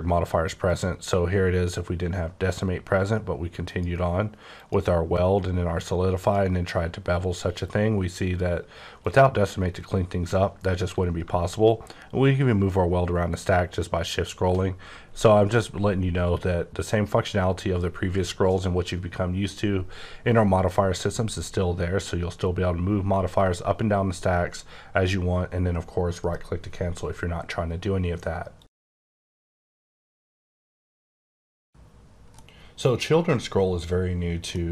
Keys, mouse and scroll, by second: 0.5 click, 3.7 click, 4.4 click, 6.2 click, 9.0 click, 11.5-12.7 shift+scroll down 4, 12.7-13.4 shift+scroll up 3, 13.4-13.9 shift+scroll down 3, 13.9-14.6 shift+scroll up 2, 14.9-16.2 scroll up 7, 16.2 scroll, 16.3 scroll up 3, 16.9-17.5 scroll up 4, 26.2 right click, 34.5 middle click.